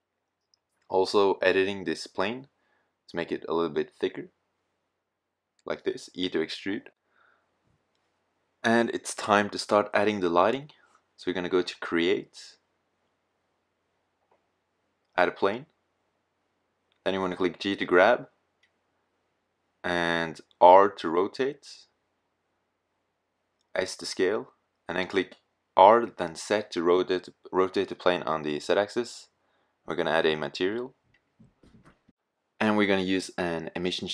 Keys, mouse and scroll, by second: 3.0 e, 4.0 click, 5.1 Tab, 14.1 middle click, 15.8 middle drag, 17.1 g, 18.2 click, 20.6 r, 22.7 s, 24.1 r, 26.0 g, 33.4-34.1 middle drag.